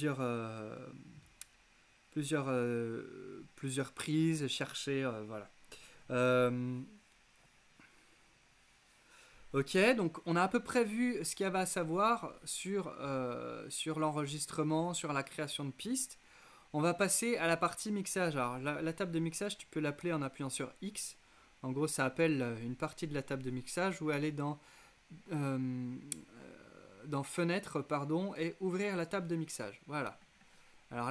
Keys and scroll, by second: 20.1 x.